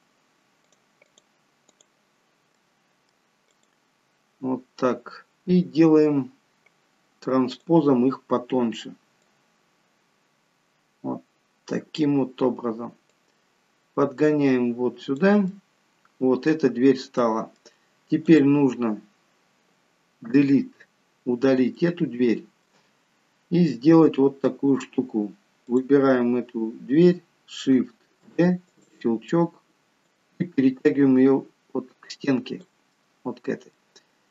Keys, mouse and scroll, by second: 2.5 middle click, 3.5 click, 7.5 click, 9.3 click, 13.1 click, 15.5 middle click, 17.2 middle click, 18.2 click, 20.6 Delete, 21.7 middle click, 25.7 click, 28.3 shift+d, 30.1 click, 32.9 middle click.